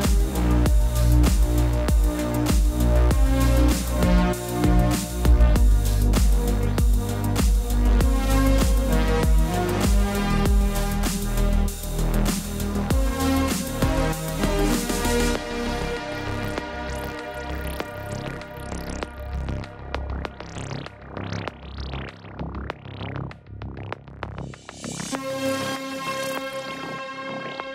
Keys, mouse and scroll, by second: 0.0 Return, 1.0 click, 2.9 ctrl+t, 3.7 click, 4.1 click, 4.6 click, 5.1 Return, 5.4 Right, 6.0-6.5 typing, 8.2 click, 9.2 b, 10.7 click, 12.0-12.8 typing, 15.9 click, 22.5-24.1 typing, 23.7 click, 24.5 click.